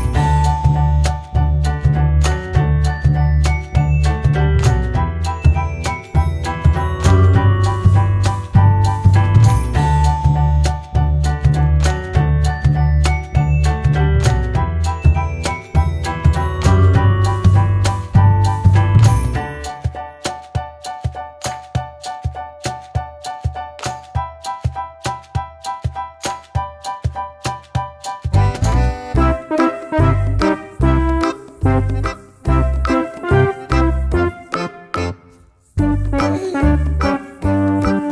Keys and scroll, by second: 6.2 typing, 7.8-11.0 typing, 21.2 ctrl+c, 21.3 ctrl+v.